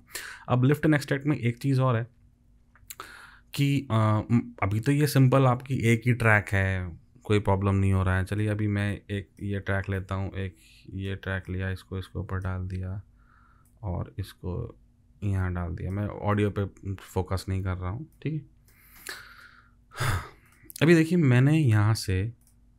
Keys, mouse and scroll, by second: 0.1 ctrl+z, 9.0 alt+click, 10.0 alt+click.